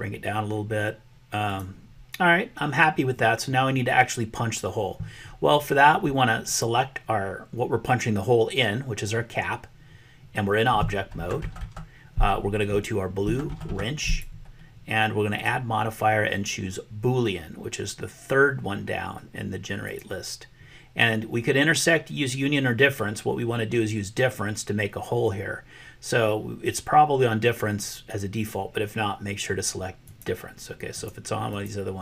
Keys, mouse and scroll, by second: 14.0 click, 15.5-20.1 drag, 30.0 click, 30.9 click, 31.6 click.